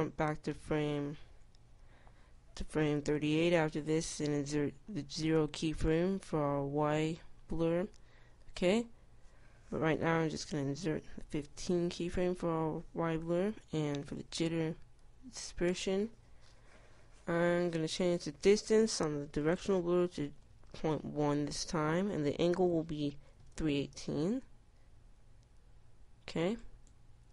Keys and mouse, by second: 11.9 i, 15.0 i, 16.0 i.